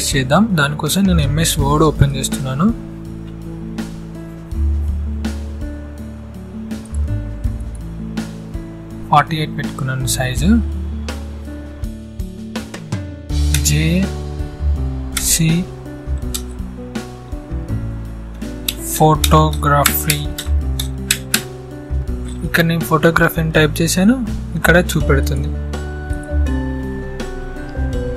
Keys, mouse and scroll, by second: 4.6 click, 8.3-13.0 drag, 13.0 j, 15.8 space, 17.5-21.3 typing, 23.0-24.7 drag.